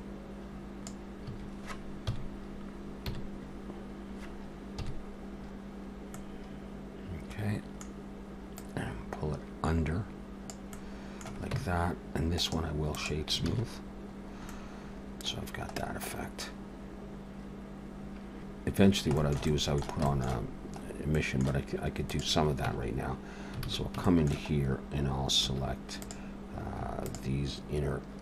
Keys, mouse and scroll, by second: 1.3 a, 1.9 KP_4, 2.9 KP_7, 4.8 KP_1, 5.5-5.9 scroll up 1, 6.1 middle click, 8.5 click, 10.7 middle click, 11.5 Tab, 12.4 right click, 13.5 alt+a, 13.6-15.4 scroll down 6, 14.5 middle click, 15.4-15.8 scroll down 2, 15.8 middle click, 18.3 middle click, 18.3 scroll up 4, 18.4 middle click, 18.9 scroll down 1, 19.2 shift+middle click, 19.5 middle click, 20.1 shift+middle click, 20.8-21.3 scroll up 2, 21.1 middle click, 22.1 click, 22.7 Tab, 23.7 alt+a, 24.0 shift+middle click, 24.6-25.4 scroll up 1, 25.4 3, 26.0 click, 27.1 shift+click.